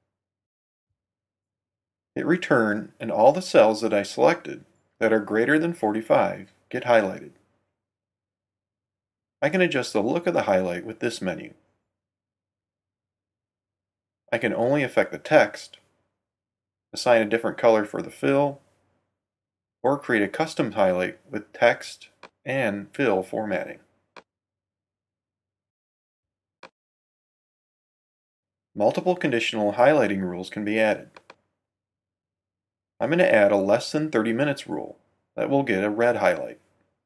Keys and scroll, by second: 0.0-0.3 typing, 2.5 Return.